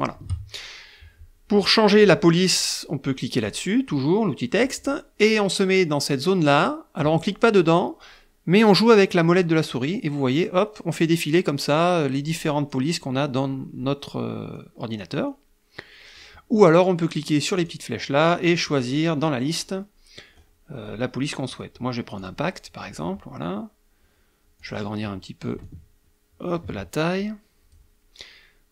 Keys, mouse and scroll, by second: 3.6 click, 9.3 scroll down 2, 10.1 scroll down 2, 10.8 scroll down 2, 11.4 scroll down 2, 12.8 scroll down 2, 14.6 scroll down 2, 15.4 scroll down 2, 16.0 scroll up 2, 17.8 click, 18.8 click, 19.6 scroll up 2, 20.4-21.2 scroll up 4, 22.3 click, 24.7 click, 25.7-26.9 ctrl+drag, 27.3 click.